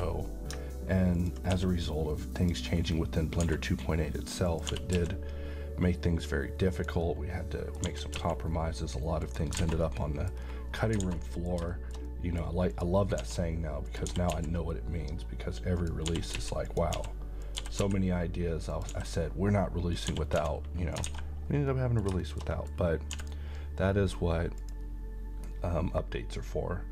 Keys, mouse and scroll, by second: 1.2 ctrl+click, 1.5 s, 2.4 click, 3.4 s, 4.5 click, 4.7 g, 5.0 x, 6.7 click, 7.0-7.9 middle click, 7.8 g, 8.1 x, 9.2 click, 9.6 alt+a, 9.9-10.5 middle click, 10.4 scroll down 1, 11.0 alt+a, 11.2 alt+middle click, 12.7 click, 13.2 s, 13.9 click, 14.1 g, 14.3 x, 15.8 click, 16.1-17.8 typing, 16.7 click, 17.4 click, 18.7 click, 18.9 s, 19.9 click, 20.1 g, 20.4 z, 20.9 click, 21.1 alt+a, 21.6 scroll down 1, 21.7 middle click, 22.8-23.1 scroll up 1, 23.1 d, 24.6 click.